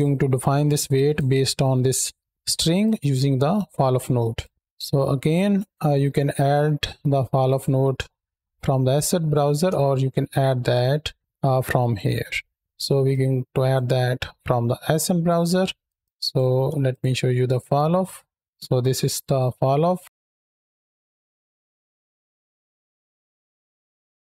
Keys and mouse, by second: 1.9 middle click, 2.6-4.2 drag, 4.7 click, 7.3 click, 9.1 shift+a, 12.5 click, 12.9 click, 14.7 click, 15.7 click, 16.7 ctrl+shift+click, 17.3 ctrl+shift+click, 17.8 middle click, 18.9 KP_7, 20.0 click, 20.4 KP_0, 21.1 shift+middle click, 21.2 middle click, 21.5-21.8 middle drag, 22.0 middle click, 22.6 shift+click, 23.0 click, 24.0 middle click.